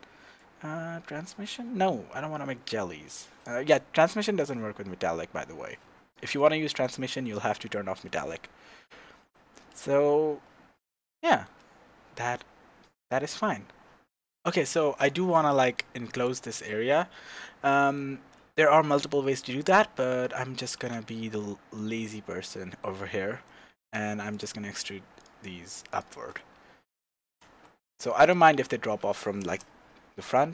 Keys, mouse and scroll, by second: 8.8-16.3 shift+middle drag, 12.4-13.9 scroll down 2, 13.9-14.3 scroll up 2, 14.3 shift+z, 16.3 click, 16.5-16.9 scroll down 1, 16.9-24.4 middle drag, 20.2-20.5 scroll down 2, 20.8 Tab, 23.9 Tab, 24.4 click, 25.2 shift+click, 26.3-28.5 middle drag, 27.3 e, 28.5 Tab, 29.1-29.4 middle drag, 29.4 KP_0, 30.2-30.5 scroll down 2.